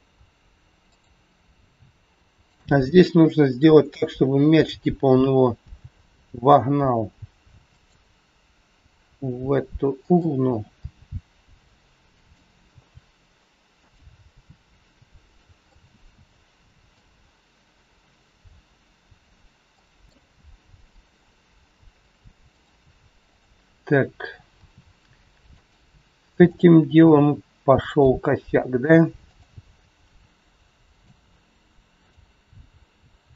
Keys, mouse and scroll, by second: 0.1-0.8 scroll down 1, 1.1 click, 2.5 shift+click, 3.9 KP_3, 5.6 g, 10.0 r, 12.2 g, 12.7 g, 15.7 middle click, 19.7 click, 20.0 middle click, 20.4-20.8 scroll up 2, 20.8 middle click, 21.6 scroll down 1, 22.4 click, 23.2 click, 24.4 r, 26.2 click, 26.4 click, 27.2 r, 28.4 click, 29.2 click, 30.0 r, 31.9 click, 33.2 g.